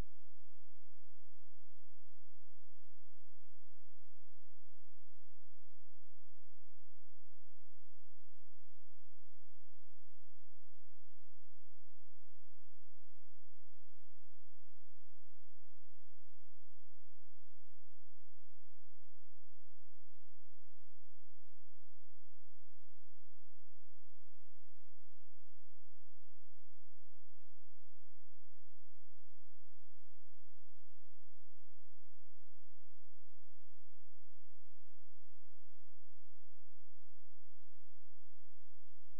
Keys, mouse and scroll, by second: 3.2 Delete, 4.4 click, 6.5 ctrl+z, 9.4 click, 13.0 click, 18.8 ctrl+click, 20.5-21.0 scroll down 1, 21.0-22.2 scroll up 1, 22.2 scroll down 1, 22.4-23.2 scroll up 1, 23.2 click, 23.6 ctrl+click, 26.0 Delete, 26.3 ctrl+click, 27.4-27.7 scroll down 1, 27.7-29.4 scroll up 1, 29.8 scroll, 33.0 click, 37.2 shift+click, 38.9 space.